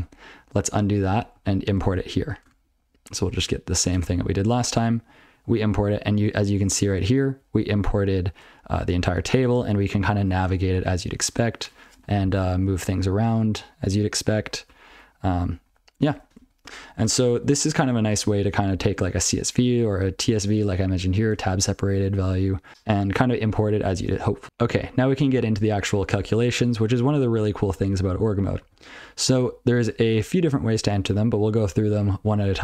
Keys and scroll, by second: 0.6 ctrl+/, 0.7 ctrl+n, 1.1 ctrl+n, 1.3 ctrl+p, 4.9 alt+x, 5.7-6.5 ctrl+n, 6.7-7.4 ctrl+p, 7.5-7.9 ctrl+n, 8.2 ctrl+n, 8.6-8.9 ctrl+p, 9.2 ctrl+n, 9.6 Tab, 9.7 ctrl+n, 9.8 Tab, 9.9 Tab, 10.1 Tab, 10.3 Tab, 10.4 Tab, 10.9 ctrl+n, 11.1 ctrl+n, 11.3 ctrl+p, 12.7 alt+Left, 13.6 alt+Right, 14.5 alt+Left, 14.9 alt+shift+Down, 15.3 alt+shift+Down, 15.6 alt+shift+Down, 16.4 ctrl+/, 16.6 ctrl+/, 17.3 ctrl+/, 17.8 ctrl+p, 17.9 ctrl+/, 18.0 ctrl+p, 18.1 ctrl+p, 18.4 ctrl+p, 18.6 ctrl+p, 19.0 ctrl+n, 19.9 ctrl+p, 20.4 ctrl+n, 20.7 ctrl+n, 21.1 ctrl+a, 21.3-22.4 ctrl+n, 22.7 ctrl+g, 24.0 ctrl+/, 25.7 ctrl+p, 26.4 ctrl+n, 26.8 ctrl+n, 27.8-28.1 ctrl+n, 28.2 ctrl+n, 28.6 ctrl+n, 29.0-29.3 ctrl+p, 29.5 ctrl+p, 29.7 ctrl+p, 31.6 ctrl+n, 31.9 ctrl+p, 32.1 ctrl+n, 32.3 ctrl+n, 32.4 ctrl+p.